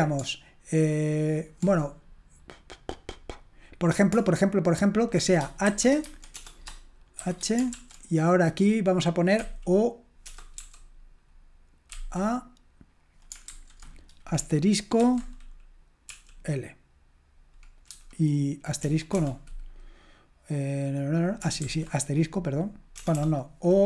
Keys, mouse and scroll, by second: 7.2-7.7 typing, 15.0 typing, 16.1 typing, 18.8 BackSpace, 19.1 BackSpace, 23.0 BackSpace, 23.1 BackSpace.